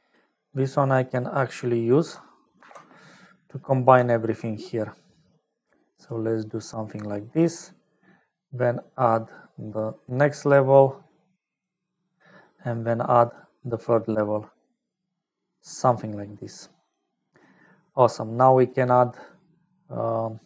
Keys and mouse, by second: 1.0 click, 2.5 alt+p, 4.0 ctrl+click, 5.5 click, 7.3 middle click, 9.8-11.6 drag, 13.9-15.6 drag, 15.9 click, 17.7 middle click, 18.3 middle click.